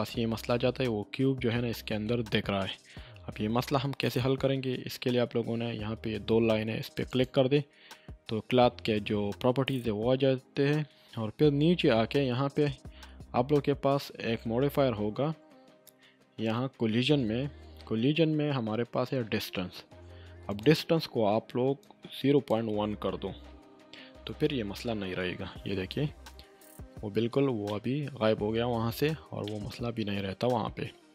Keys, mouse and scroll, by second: 0.8-1.5 scroll up 1, 1.5-2.1 middle click, 1.7 scroll up 1, 4.0-4.6 middle drag, 7.1 click, 9.8-13.4 scroll down 1, 16.7 scroll down 1, 20.5-22.7 drag, 23.5 1, 24.3 Return, 27.6 Return, 27.7-28.3 middle drag.